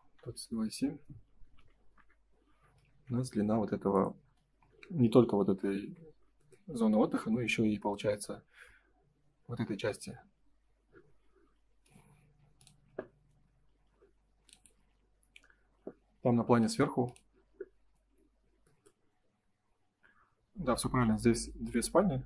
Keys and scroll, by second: 1.9 q, 1.9 Return, 4.1 space, 5.7 ctrl+s.